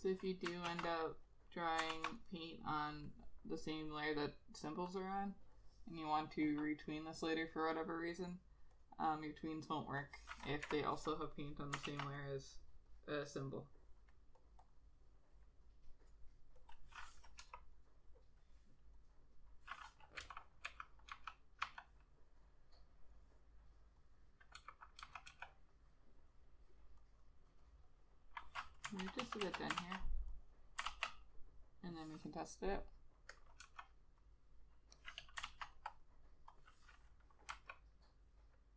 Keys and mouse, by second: 0.8 ctrl+z, 1.9 ctrl+z, 9.2 double click, 10.8 Delete, 12.0 ctrl+z, 14.8 double click, 17.5 Delete, 20.3-21.8 typing, 24.8 [, 25.1 ], 25.4 ], 28.0 double click, 29.1 ctrl+z, 29.4 ctrl+z, 29.6 ctrl+z, 29.9 ctrl+z, 31.0 ctrl+z, 33.8 ], 35.6 ctrl+z, 37.7 ].